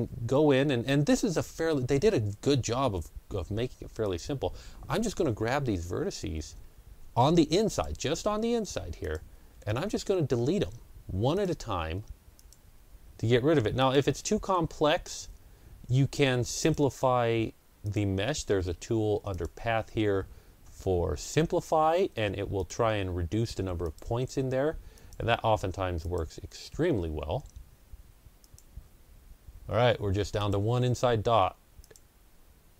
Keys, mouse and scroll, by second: 1.2 ctrl+scroll down 1, 3.9 click, 3.9-4.6 ctrl+scroll down 1, 5.6 Delete, 5.6-7.4 ctrl+scroll down 1, 7.6 click, 7.8 Delete, 8.9 click, 9.3 Delete, 11.2 click, 11.5 Delete, 12.2 click, 12.5 Delete, 13.7 click, 13.9 Delete, 16.5 click, 17.0 Delete, 17.7 click, 18.0 Delete, 19.2 click, 19.2 click, 22.5 Delete, 22.5 click, 23.7 click, 24.0 Delete, 24.8 click, 25.4 Delete, 25.9 click, 26.3 Delete, 28.3 click, 28.6 Delete, 30.2 click, 30.8 Delete, 31.7 click, 32.6 Delete.